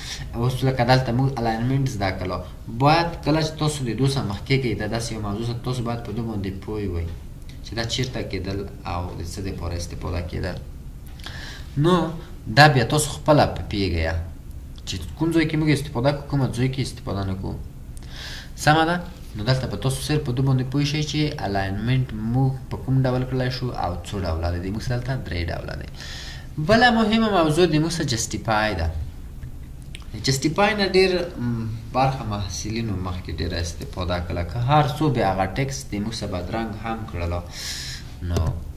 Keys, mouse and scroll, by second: 35.5-38.6 scroll.